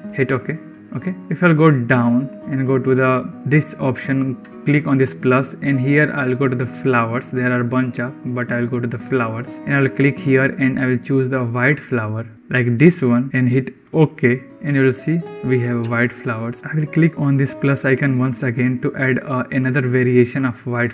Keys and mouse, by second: 4.6-14.0 drag, 17.6-20.9 drag.